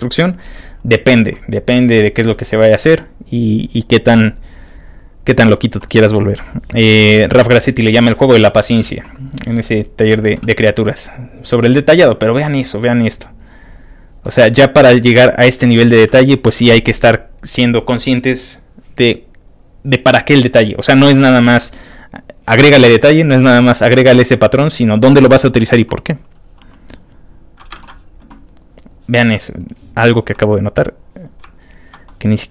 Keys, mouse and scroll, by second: 1.6-2.1 scroll down 3, 2.8 scroll down 2, 3.7 middle click, 3.8 middle click, 4.9 middle click, 6.3 click, 7.6-8.3 scroll down 2, 9.2 scroll down 1, 10.0-10.6 scroll down 2, 11.0-11.6 scroll down 1, 12.8 click, 12.9 scroll up 1, 13.7 click, 14.2 middle click, 24.1-25.1 scroll down 4, 26.7-27.1 scroll up 3, 27.7 ctrl+w, 28.5-28.9 scroll up 2, 28.9 click, 29.5 click, 30.2 click, 30.8 click, 31.2-32.0 scroll up 2, 31.6 ctrl+middle click.